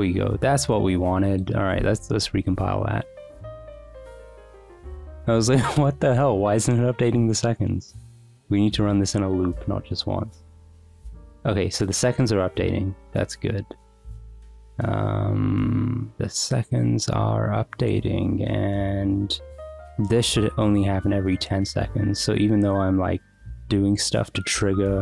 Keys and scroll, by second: 2.0 ctrl+c, 2.2 Up, 2.4 Return.